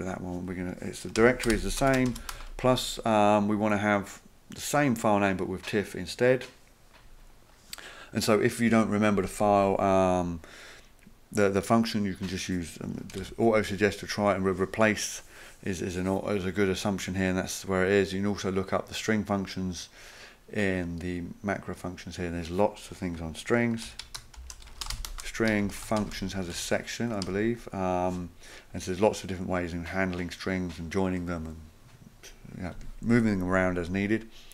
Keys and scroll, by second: 1.0-2.3 typing, 12.9-13.7 typing, 23.8 ctrl+f, 24.2-27.7 typing.